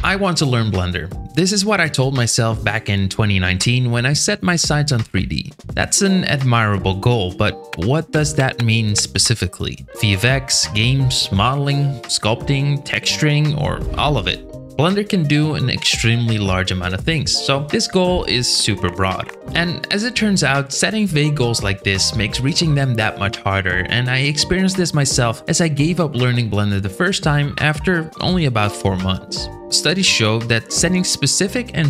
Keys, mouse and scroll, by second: 0.1-1.3 right drag.